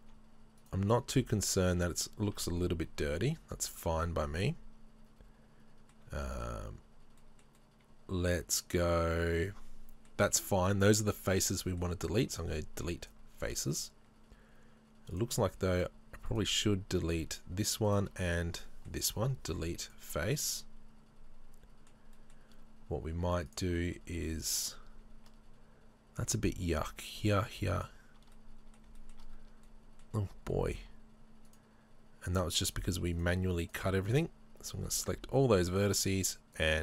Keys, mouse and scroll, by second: 0.6 shift+right click, 1.2 shift+right click, 1.5 shift+right click, 3.2-12.4 middle drag, 12.2 Delete, 13.5 middle click, 15.2 click, 15.8 right click, 16.3 right click, 17.9 shift+right click, 18.2-23.5 middle drag, 19.3 Delete, 22.1-22.6 scroll up 2, 23.5 click, 23.8-26.4 middle drag, 24.8-26.4 scroll up 3, 26.4-27.9 right drag, 28.3-31.5 middle drag, 28.3 scroll up 2, 29.4-29.7 scroll up 2, 31.5 shift+right click, 33.2 shift+right click, 33.7 shift+right click, 34.1 shift+right click, 35.3 middle click, 36.1 shift+right click, 36.6 shift+right click.